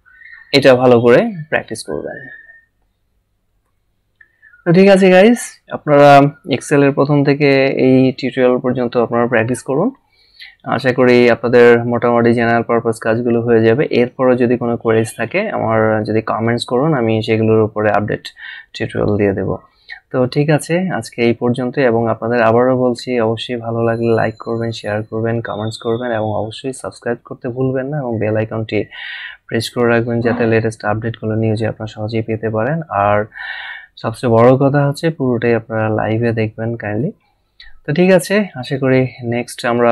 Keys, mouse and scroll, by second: 3.6 a.